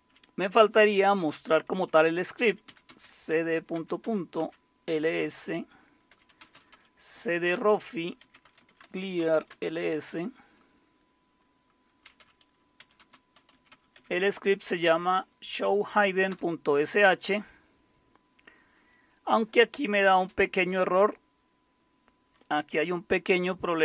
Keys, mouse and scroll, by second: 2.2-10.0 typing, 11.7-18.5 typing.